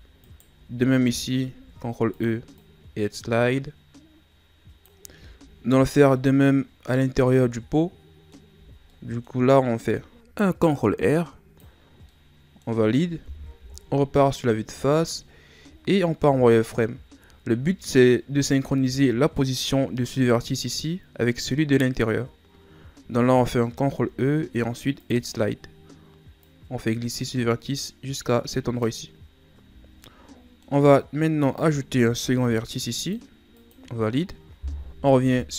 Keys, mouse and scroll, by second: 0.2 alt+right click, 1.6 ctrl+e, 5.8-6.1 scroll down 3, 6.1-8.5 middle drag, 8.5 z, 8.9 middle click, 9.5-10.3 scroll up 1, 10.3 ctrl+r, 12.1-13.6 middle drag, 13.6 KP_1, 15.2-16.2 shift+scroll up 7, 16.2 z, 17.3-19.2 ctrl+scroll up 1, 19.2-19.8 ctrl+scroll up 2, 23.8 ctrl+e, 29.8 scroll down 2, 30.0-31.1 middle drag, 31.1-32.1 scroll up 2, 32.1 ctrl+r, 35.0 KP_1.